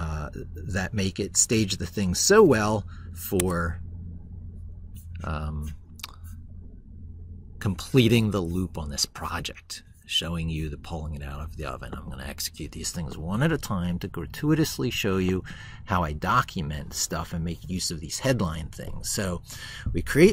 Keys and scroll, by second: 2.0 ctrl+shift+r.